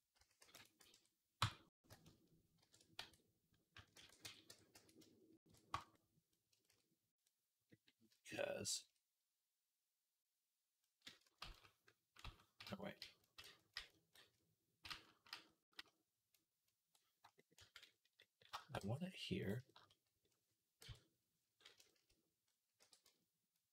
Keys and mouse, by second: 0.0 s, 1.2 Tab, 1.6 a, 2.4 shift+n, 2.8 Tab, 3.8 ctrl+a, 4.3 Tab, 4.6 a, 5.3 shift+n, 5.6 Tab, 11.3 ctrl+z, 12.1 ctrl+z, 12.8 ctrl+z, 13.3 ctrl+z, 16.7 ctrl+z, 18.0-19.3 shift+drag, 18.0-19.3 shift+middle drag, 18.0-23.7 shift+right drag, 18.6 g, 20.7 KP_7, 22.6 r.